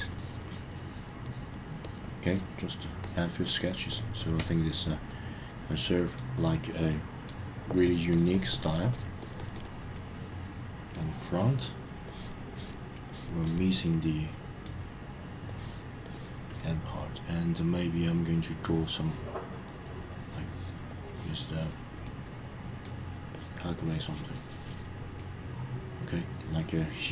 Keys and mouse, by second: 0.1 click, 0.5 click, 0.7 click, 1.2 click, 1.8 click, 2.2 click, 3.0 click, 3.4 click, 3.7 click, 3.9 click, 4.2 click, 4.4 click, 4.5 click, 4.7 click, 5.1-6.2 middle drag, 6.5 middle click, 7.8 click, 8.1 click, 8.3 click, 8.5 click, 8.7 click, 8.9 click, 9.2 click, 9.4 click, 9.5 click, 9.9 middle click, 12.1 click, 12.5 click, 13.1 click, 13.4 click, 13.8 middle click, 15.5 click, 16.0 click, 16.5 click, 18.9-20.8 drag, 20.9 click, 21.5 click, 22.0 middle click, 23.3 click, 24.0 click, 25.2-27.0 middle drag.